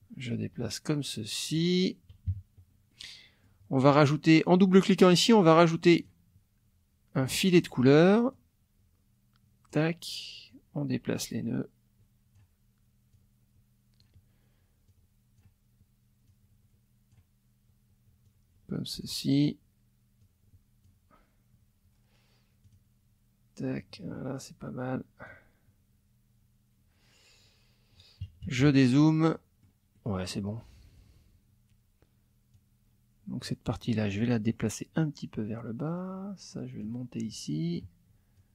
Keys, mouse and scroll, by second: 2.3 KP_Subtract, 2.9 click, 5.8 click, 8.3-9.9 drag, 10.5-12.5 drag, 13.1-14.2 drag, 14.9 click, 16.2-17.3 drag, 18.2 click, 20.2 click, 22.6 click, 23.8-25.4 drag, 28.2 KP_Subtract, 29.3 middle click, 29.4 click, 29.8 middle click, 29.9 middle click, 30.6 middle click, 32.5-33.6 drag, 33.7 middle click, 34.1 click, 34.5 click, 36.8-37.9 drag, 38.4 click.